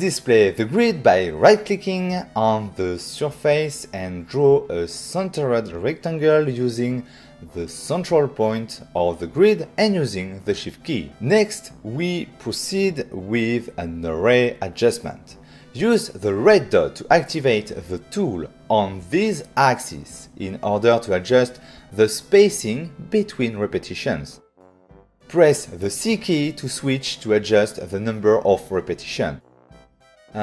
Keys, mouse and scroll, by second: 1.6 click, 4.4 shift+click, 8.4 click, 8.5 click, 9.5 click, 13.1 click, 13.8 click, 15.0 click, 16.8 click, 24.4 c.